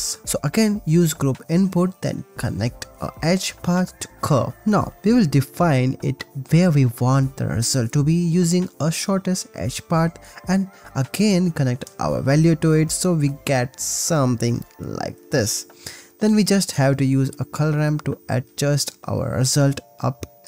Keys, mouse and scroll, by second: 4.8 shift+a, 7.7 click, 8.2 click, 9.7-10.7 drag, 11.4-13.9 drag, 14.1 click, 14.4 shift+a, 18.1 click, 19.7 click, 20.1 click.